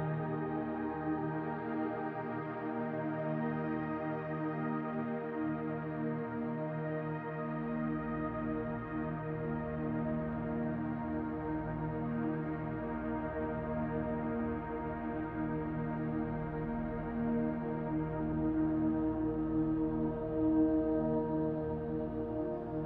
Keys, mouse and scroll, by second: 3.4 click, 5.4 middle click, 7.6-8.5 scroll down 2, 8.6-9.9 scroll down 5, 9.9-13.0 scroll down 1, 13.0 click, 13.0 scroll down 1, 17.2 middle click, 19.2-21.2 scroll up 11, 21.2 click.